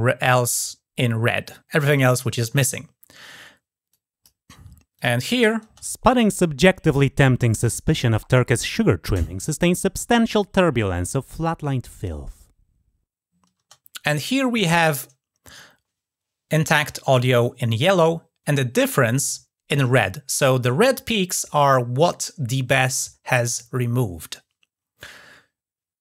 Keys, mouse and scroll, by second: 3.7 click, 4.8 click.